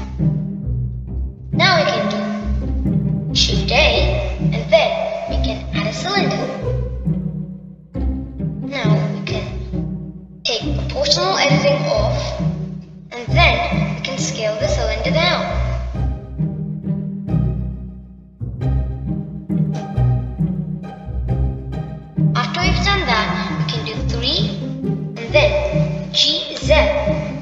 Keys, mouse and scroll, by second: 2.5 scroll down 1, 2.6-5.6 middle drag, 5.6 shift+a, 22.0 middle click, 23.0-25.3 scroll up 2, 27.0 middle click.